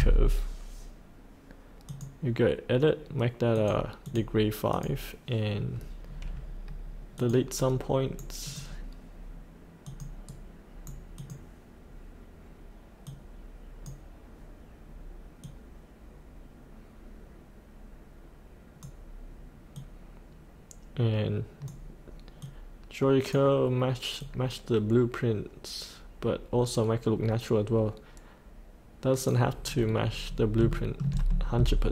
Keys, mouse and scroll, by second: 6.0-7.2 scroll down 1, 7.2 click, 7.6 right click, 8.4 click, 10.3 right click, 11.1-29.7 drag, 29.7-30.6 scroll up 1, 30.7 shift+middle click, 31.3-31.9 scroll down 1.